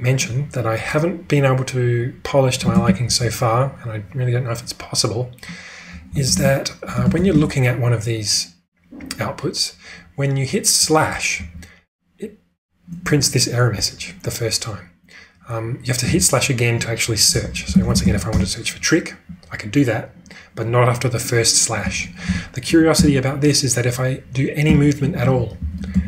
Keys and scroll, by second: 2.8 ctrl+space, 3.0 typing, 5.8-7.6 typing, 17.4-18.5 typing, 21.8 q, 23.0 Return, 24.4-26.0 typing.